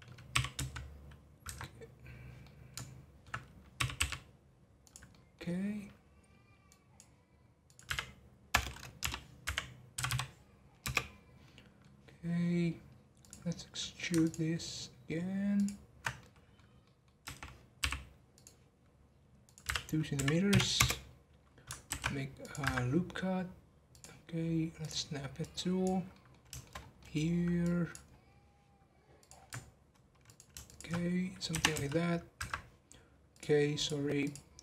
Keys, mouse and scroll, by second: 0.3 g, 2.4-3.7 middle drag, 3.7 g, 5.1-7.6 middle drag, 7.6-10.0 drag, 10.0 m, 11.4 middle click, 11.9 scroll down 1, 13.2 click, 14.2 ctrl+click, 15.5 ctrl+click, 16.2-17.2 middle drag, 17.2 e, 19.4-21.8 drag, 21.8 ctrl+r, 23.9 click, 25.3 click, 26.1 middle click, 26.7 scroll up 1, 26.9 middle click, 27.6 click, 28.0-29.1 scroll down 4, 29.1-30.3 drag, 30.6 alt+shift+click, 31.5 r, 33.3-34.6 drag.